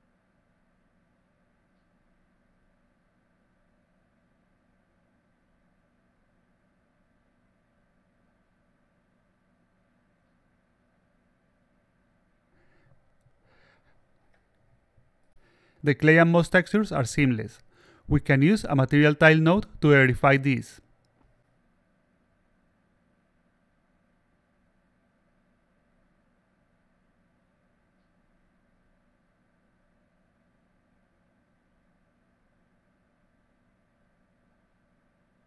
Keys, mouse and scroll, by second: 2.4 click, 5.1 click, 9.7 click, 10.1 click, 14.0 click, 15.5 click, 16.3 alt+click, 17.9 click, 18.9-20.8 drag, 21.5 click, 22.5 click, 26.3 click, 29.7-30.3 drag, 31.3-32.3 drag, 34.0-35.0 alt+drag, 35.2-35.4 alt+drag.